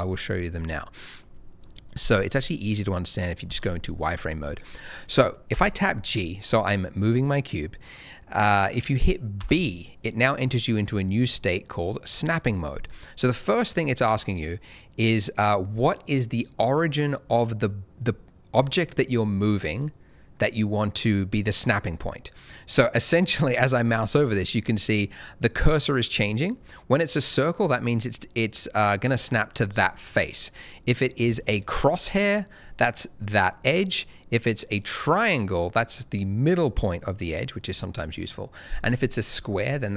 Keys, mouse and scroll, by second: 3.4 click, 4.8 middle click, 5.5 g, 9.4 b.